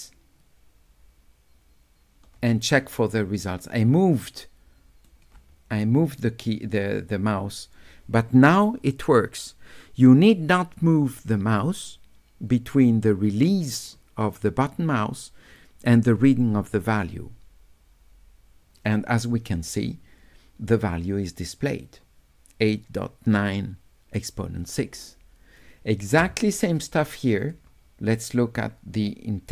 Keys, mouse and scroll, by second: 3.8-5.1 right drag, 27.5 click.